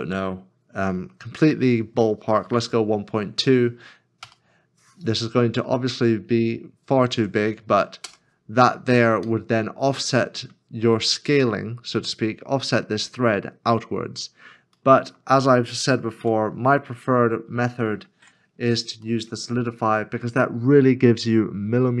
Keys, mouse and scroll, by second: 4.2 ., 4.2 2, 8.0 Return, 9.3 middle click, 13.7 scroll down 1, 14.8 middle click, 16.2 /, 17.0 /, 17.0 scroll down 1, 17.7 middle click, 18.2 Tab, 18.5 scroll down 1, 19.2 scroll down 1, 19.3 middle click.